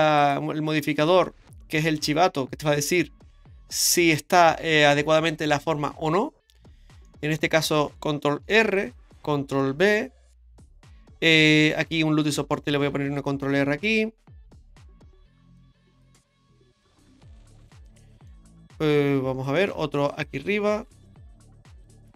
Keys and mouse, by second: 0.2-2.6 drag, 3.8 click, 7.1 middle click, 8.4 ctrl+r, 9.7 ctrl+b, 11.4 middle click, 12.9 ctrl+r, 16.8 click, 18.0 middle click, 19.7 ctrl+r.